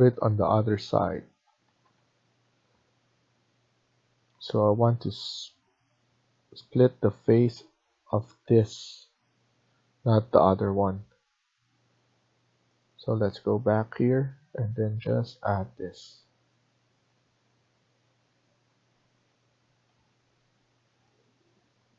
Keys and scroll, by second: 0.7 ctrl+z, 2.3 Escape, 19.5 Escape.